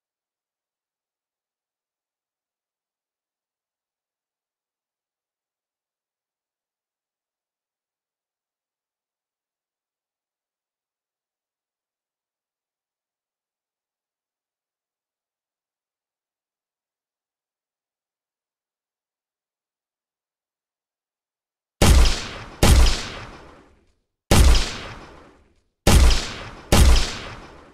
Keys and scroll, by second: 3.5 ., 3.8 2, 4.1 Return, 6.6-7.5 typing, 7.8 Return, 11.3 w, 20.2-21.1 typing, 23.2 s, 27.0 w.